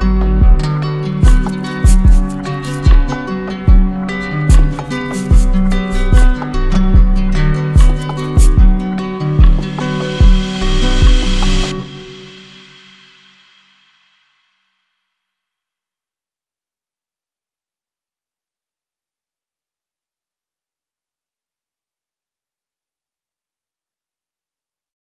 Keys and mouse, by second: 0.6 click, 0.7 ctrl+s, 3.2 click, 4.7 click, 5.3 shift+click, 6.8 click, 9.1 click, 9.8 shift+click, 12.6 click, 13.2 shift+click, 14.2 alt+click, 20.9 click, 21.6 shift+click, 24.4 shift+click.